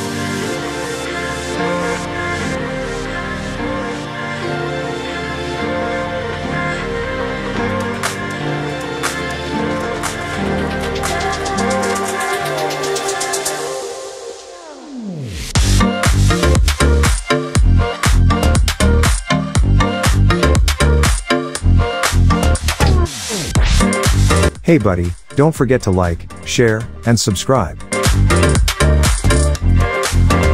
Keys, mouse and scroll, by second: 0.8 ctrl+d, 1.7 shift+click, 2.9 ctrl+g, 3.4 right click, 5.1 click, 6.4-9.1 drag, 9.1 alt+scroll down 1, 9.5 shift+click, 9.9-10.4 drag, 11.8 alt+scroll up 1, 12.6-14.4 drag, 15.6 shift+click, 16.4 click, 17.5 scroll up 2, 18.0-20.2 drag, 20.2 alt+scroll down 1, 20.5 shift+click, 21.4-22.3 alt+scroll down 2, 22.3 click, 23.1-23.5 scroll down 2, 23.5 click, 25.8-30.1 drag, 29.0-29.7 alt+shift+drag, 30.3 shift+click.